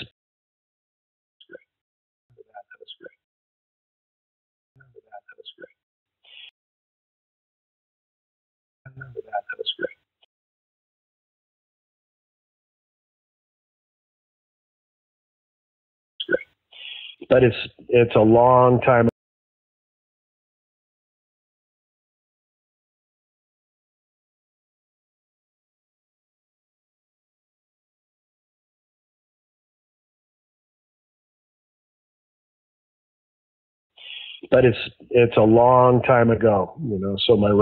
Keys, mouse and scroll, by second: 0.0 space, 0.2 click, 0.3 click, 1.3 space, 1.7 space, 2.1 click, 2.2 space, 3.1 space, 3.6-4.6 drag, 4.6 space, 6.0 space, 6.4 space, 6.8-8.2 drag, 8.7 click, 8.8 space, 10.2 space, 10.9 click, 11.1 click, 13.0 click, 13.2 click, 14.7 click, 14.9 click, 16.1 space, 18.3 click, 19.0 space, 19.3 click, 20.2 click, 21.0 ctrl+s, 21.5 space, 33.7 click, 33.8 space, 36.1-37.6 drag.